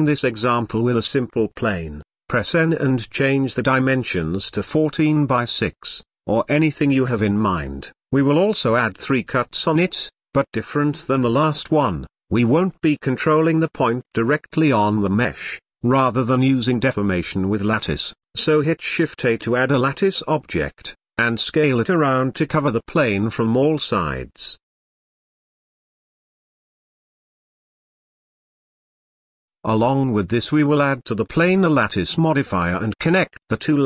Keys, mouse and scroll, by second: 1.0 x, 2.0 shift+a, 3.9 KP_7, 4.5-4.8 scroll up 4, 5.1 click, 6.0-7.8 drag, 7.8-8.3 scroll down 6, 8.3-8.6 scroll up 1, 8.6 Tab, 9.4 ctrl+r, 14.2-14.6 scroll down 3, 14.6 middle click, 15.4-16.5 scroll up 3, 16.5 n, 16.7 Tab, 17.0 Tab, 17.2 click, 17.5 g, 17.6 Tab, 19.9 shift+a, 21.5 KP_7, 21.9 s, 24.0 s, 26.1-26.6 drag, 26.6-27.6 middle drag, 27.6 s, 30.0-30.7 middle drag, 30.7 click, 31.2-32.6 middle drag, 32.6 click, 33.1-33.8 drag.